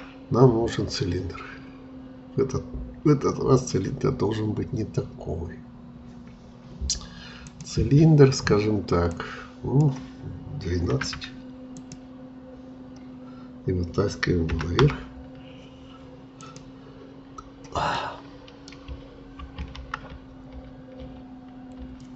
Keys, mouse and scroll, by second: 9.1-10.9 drag, 10.9 1, 11.1 2, 11.7-13.2 drag, 14.5 g, 14.8 z, 17.9-19.7 middle drag, 19.7 ctrl+z, 20.1 ctrl+z, 20.6 ctrl+z, 21.0 ctrl+z.